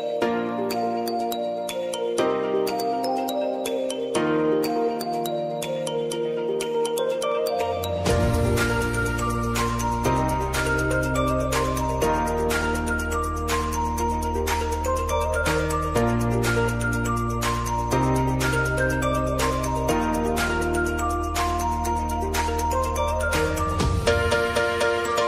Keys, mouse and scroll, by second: 0.9 scroll down 1, 1.9-4.6 drag, 5.2 space, 7.2-10.5 drag, 10.5 space, 12.9 space, 13.4 click, 14.9 space.